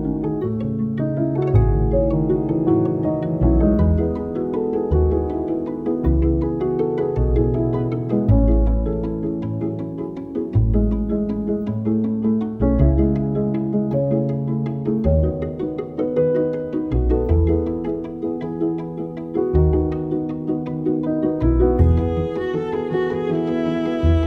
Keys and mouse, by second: 0.0-1.8 typing, 3.2 alt+middle click, 3.4-4.8 typing, 3.5 KP_Enter, 5.3 ctrl+z, 5.4 ctrl+z, 5.7 ctrl+z, 6.0 ctrl+z, 6.5 click, 6.7 s, 7.1 g, 7.4 r, 7.9 s, 8.8 click, 9.0 2, 9.1 click, 9.3 s, 10.4 alt+middle click, 10.8 s, 11.6 click, 11.8 s, 13.2 Tab, 13.4 alt+middle click, 13.9 Tab, 14.1 click, 14.4 3, 14.6 KP_1, 14.8 KP_3, 15.0 g, 15.9 alt+middle click, 16.4 r, 16.8 g, 18.2 middle click, 18.7 click, 18.9 2, 19.0 click, 19.2 KP_3, 19.4 g, 20.5 middle click, 20.9 click, 21.1 KP_3, 21.2 g, 22.5 g, 23.2 s.